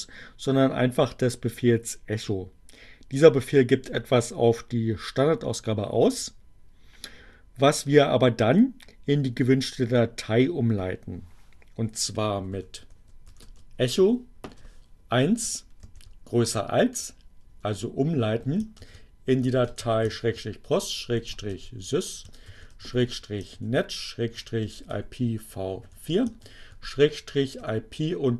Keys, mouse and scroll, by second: 12.0-15.0 typing, 17.4 space, 18.6-25.7 typing, 27.2-28.3 typing.